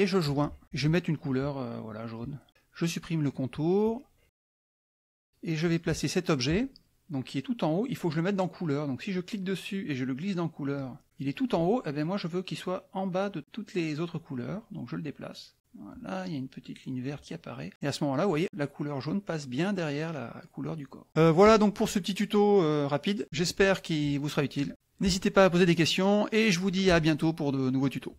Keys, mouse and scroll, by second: 0.2 click, 0.6 middle click, 2.2 click, 3.8 click, 5.6 click, 9.1-11.0 drag, 14.5-17.3 drag, 17.8 middle click, 23.2 F2.